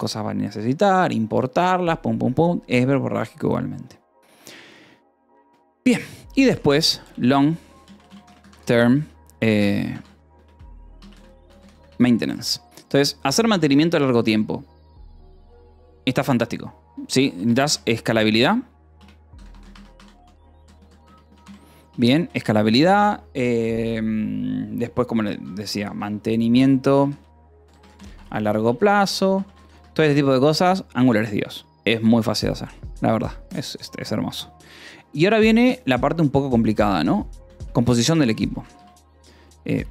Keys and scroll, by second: 6.7-11.5 typing, 11.7 Escape, 12.7 ctrl+s, 17.2-22.2 typing, 24.8-29.9 typing, 30.5 ctrl+s, 31.2 o, 31.5 Return, 37.8-39.3 typing.